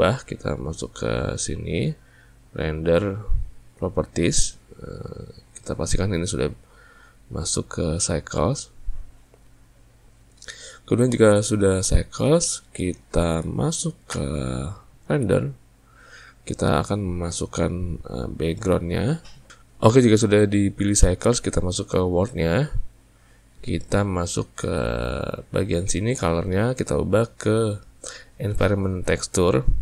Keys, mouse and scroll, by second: 1.2 click, 5.6-8.7 drag, 12.3-14.2 ctrl+middle drag, 14.2 z, 19.5 click, 22.6 click, 26.6-29.6 drag.